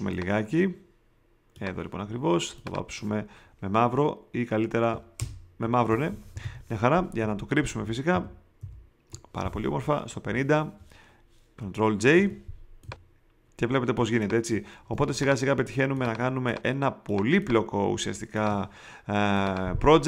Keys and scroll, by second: 5.1 alt+BackSpace, 6.1 alt+super+BackSpace, 6.4 alt+super+d, 7.2 super+v, 7.7 shift+Down, 10.2 5, 12.1 super+j, 12.8 shift+super+j, 14.9 shift+space.